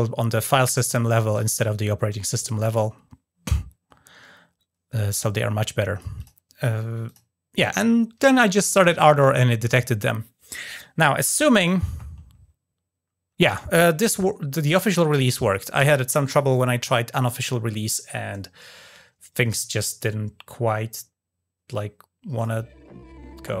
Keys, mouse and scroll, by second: 5.1-5.8 drag, 5.9 drag, 6.8 drag, 14.5 click, 22.2 click.